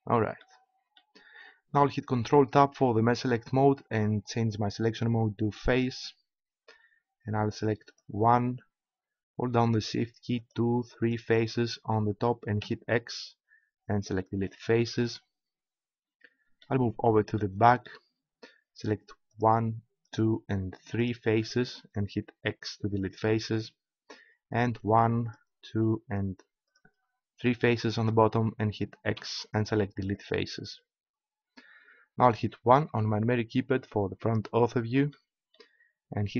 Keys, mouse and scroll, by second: 2.1 ctrl+Tab, 7.8-13.6 right drag, 12.6 x, 16.1-17.4 middle drag, 19.5-24.3 right drag, 22.5 x, 24.5-26.0 right drag, 29.1 x, 32.8 KP_1.